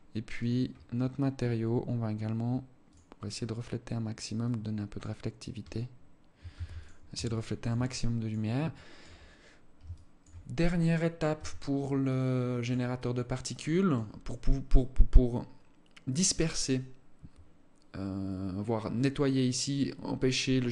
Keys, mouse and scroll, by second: 1.4-1.8 scroll down 4, 2.3 click, 2.7 click, 2.9-3.3 scroll down 2, 3.9 click, 5.1-5.4 scroll up 3, 5.9 ctrl+s, 6.7 alt+shift+click, 7.3 alt+click, 8.2 alt+shift+click, 8.7-9.1 scroll up 2, 9.3 alt+shift+click, 10.1 right click, 10.4 scroll down 2, 10.9 Tab, 11.7 alt+click, 12.5 alt+click, 15.0 scroll up 1, 15.7 scroll down 1.